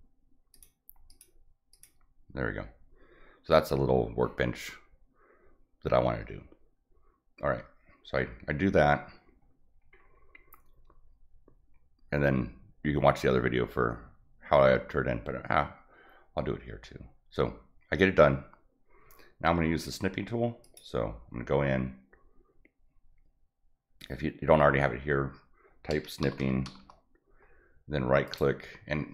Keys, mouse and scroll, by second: 0.5 click, 1.1 click, 1.7 click, 9.7 middle click, 10.1 scroll up 1, 20.6 click, 26.0-27.1 typing, 28.3 right click.